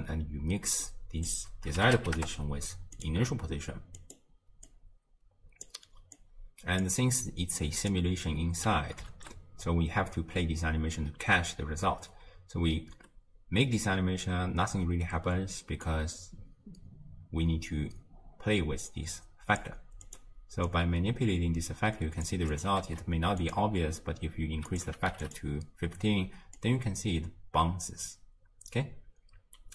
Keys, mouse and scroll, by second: 0.9 drag, 4.0 click, 4.7 click, 6.2 drag, 7.6-9.2 drag, 9.2 shift+space, 9.7 scroll down 2, 12.0 space, 12.9 space, 14.0-15.1 scroll up 1, 15.9-18.9 drag, 20.0 click, 20.7-23.6 drag, 24.7-25.3 drag, 26.6-29.6 drag.